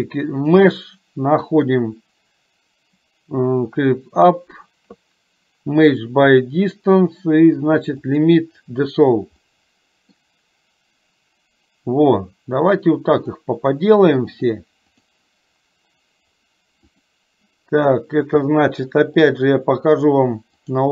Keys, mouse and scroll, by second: 0.4-8.4 drag, 9.7 middle click, 13.3 click, 14.6 click, 16.9 click, 19.3-20.9 drag.